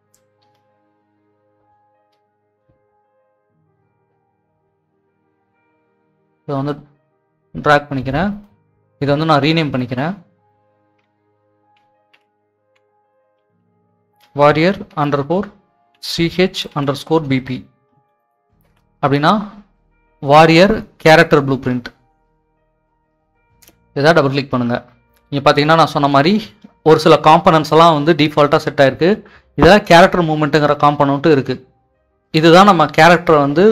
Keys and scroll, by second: 12.0-13.6 typing, 15.5-16.2 typing, 17.6-18.4 typing, 18.8 Return.